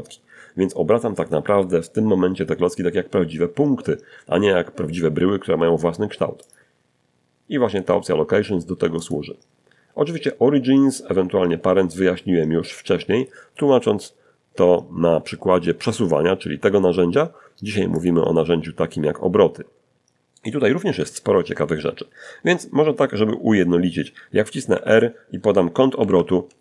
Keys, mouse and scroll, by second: 4.6 click, 7.2 click, 16.2 click, 17.9 scroll down 2, 19.2 1, 23.0-24.8 typing, 24.9 Return.